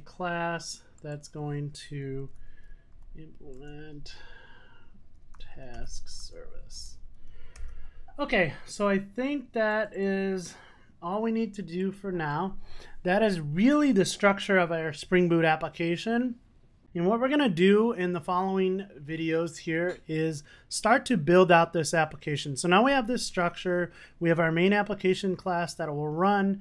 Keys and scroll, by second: 3.6 Return, 7.7 Return, 7.8 super+s.